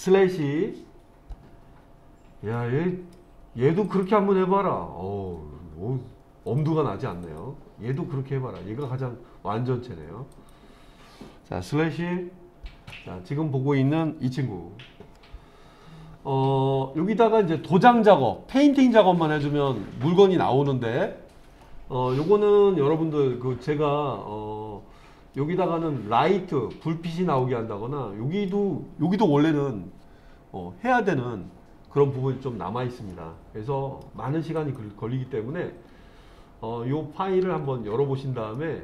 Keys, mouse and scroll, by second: 0.4 /, 2.5-3.2 middle drag, 3.9 click, 6.5 click, 7.2 click, 8.0-8.9 middle drag, 10.3 click, 12.0 /, 16.9-17.6 scroll up 2, 21.6-25.4 middle drag, 27.4-28.5 middle drag, 33.1-34.0 middle drag, 34.5 click, 37.4 Tab, 38.5 middle click.